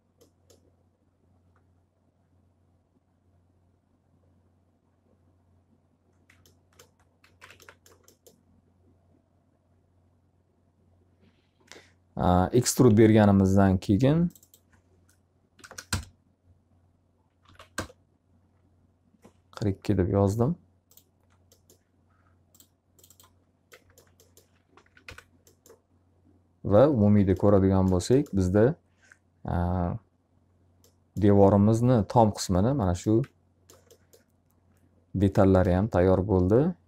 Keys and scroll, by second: 6.9 z, 7.5 alt+a, 15.1 0, 15.9 Return, 17.4 2, 17.7 Return, 24.2 F3, 25.0 F4.